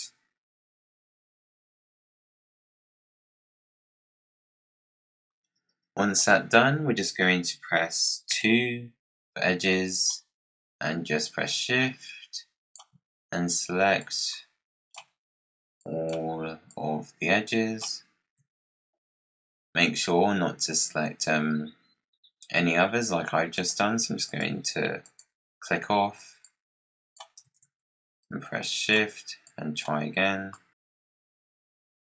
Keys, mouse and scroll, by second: 1.2 click, 1.7 click, 2.3 click, 2.7 click, 2.9 click, 3.5 click, 4.2 click, 4.4 click, 4.9 click, 5.2-6.1 scroll down 14, 8.2 2, 9.5 click, 11.7-14.0 drag, 15.7 shift+click, 16.6 shift+click, 19.7 scroll up 2, 19.8 scroll down 1, 20.1-22.3 scroll up 1, 22.7-23.4 scroll down 3, 23.4 click, 24.2 click, 24.9 click, 26.3 click, 27.6 z, 28.1 shift+click, 29.4 shift+click, 30.4 shift+click, 30.8 shift+click, 31.2 shift+click, 31.6-32.2 scroll up 5, 31.8 click.